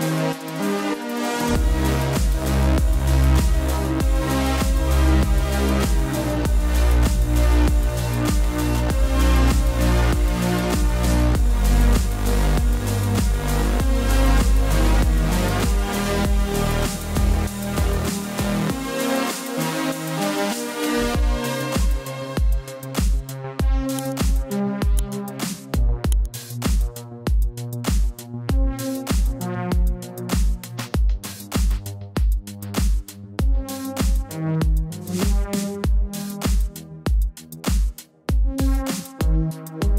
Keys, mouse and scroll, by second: 1.7 click, 4.5 click, 6.8 ctrl+t, 7.2 click, 8.0 right click, 9.0 click, 13.1 Return, 13.5 click, 13.7 ctrl+z, 13.9 click, 14.2 ctrl+z, 14.6 click, 14.8 space, 15.5 click, 18.0 click, 20.4 click, 22.9 click, 27.7 click, 35.2 space, 35.3 click, 39.3 right click.